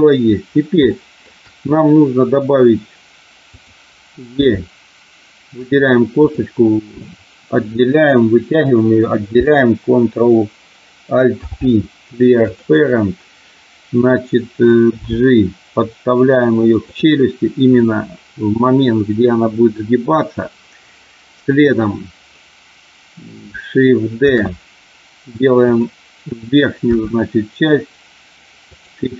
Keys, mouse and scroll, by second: 1.0 shift+middle click, 3.5 click, 4.4 e, 5.6 click, 6.1 click, 11.2 alt+p, 15.0 g, 16.9 click, 24.3 shift+d, 25.6 click, 26.9 r, 28.6 click.